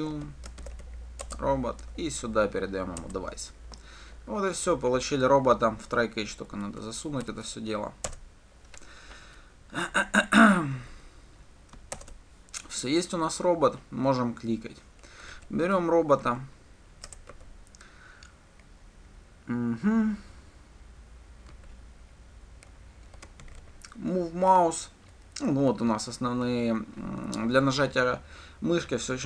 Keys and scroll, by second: 0.0 Return, 1.9 Return, 8.3 alt+Return, 12.2 shift+Return, 17.3 Return.